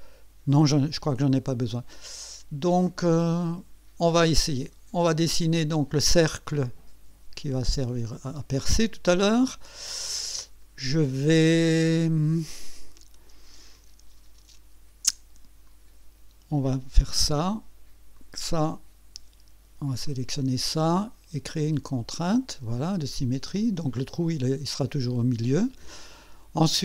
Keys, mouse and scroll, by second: 3.5 right click, 4.1-5.7 right drag, 5.7 click, 6.6 click, 7.6 click, 8.2 right click, 15.7 click, 18.2 click, 20.1 click, 21.6 click, 23.5-25.7 drag.